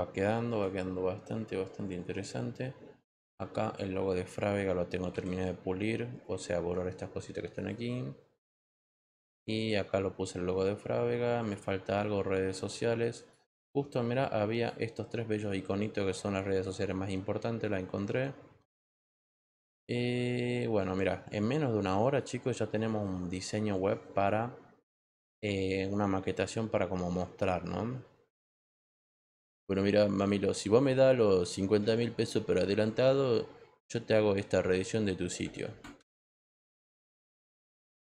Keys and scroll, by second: 5.1 e.